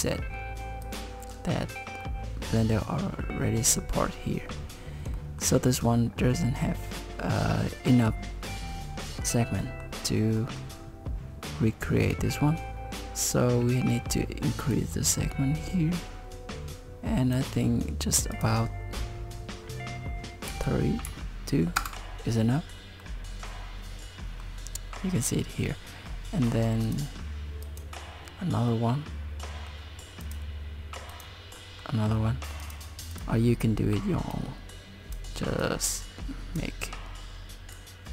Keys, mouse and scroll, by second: 2.0 middle click, 4.4-5.1 scroll up 1, 5.2 middle click, 5.8 scroll up 1, 7.0 middle click, 8.7 scroll down 1, 9.6 middle click, 10.4 middle click, 14.7 click, 18.3 click, 23.0 middle click, 26.9 click, 28.7 middle click, 30.2 click, 31.6 middle click, 32.6 click, 34.3 click, 35.6 click, 37.9 click.